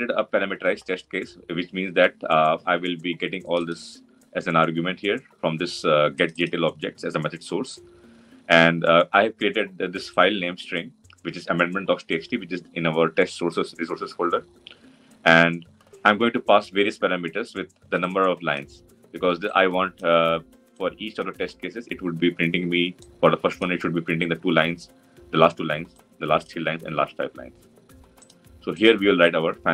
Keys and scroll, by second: 29.6 Tab.